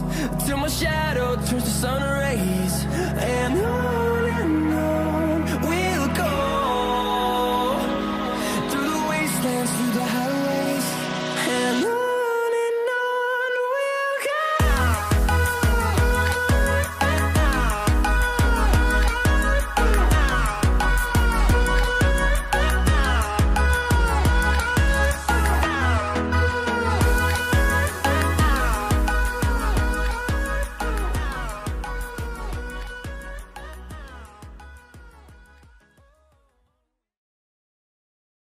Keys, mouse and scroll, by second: 8.8 v, 10.3 v, 15.8 double click, 20.9 Return, 20.9 double click, 24.4 ctrl+t, 27.4 alt+click, 29.1 alt+click, 30.8 Return, 32.8 ctrl+t, 34.1 alt+click.